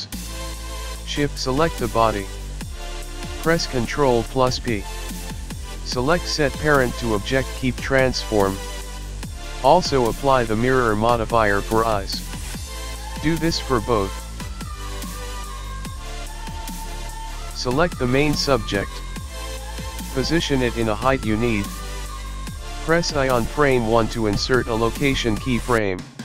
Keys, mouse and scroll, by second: 0.9 p, 1.3 p, 3.0 click, 3.3 click, 3.7 g, 7.9 click, 8.9 click, 10.0 g, 10.8 click, 11.9 g, 12.4-13.1 scroll down 2, 13.1 click, 13.8 shift+click, 15.3 ctrl+p, 16.3 click, 16.6 click, 17.3 shift+middle click, 17.3 click, 17.3-17.9 scroll up 2, 17.3 g, 19.6 i, 23.3 click.